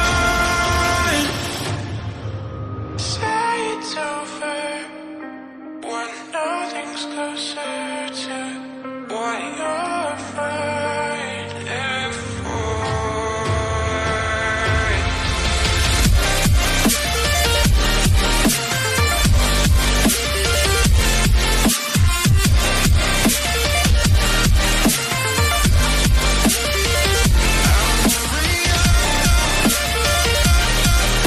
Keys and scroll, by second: 5.6 ctrl+d, 5.7-6.8 typing, 8.1 Return, 16.1 1, 24.3 1, 26.8 Caps_Lock.